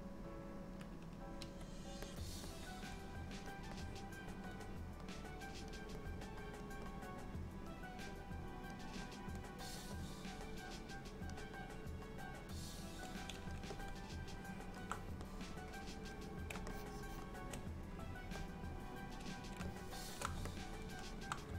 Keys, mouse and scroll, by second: 1.4 f, 2.6 click, 3.9 click, 5.2 click, 6.1 click, 7.0 click, 8.2 click, 9.2 click, 10.1 click, 11.0 click, 11.8 click, 13.2 click, 13.8 alt+middle click, 15.3 click, 16.8 shift+click, 17.1 shift+click, 18.5 middle click, 19.8 shift+middle click, 20.6 middle click.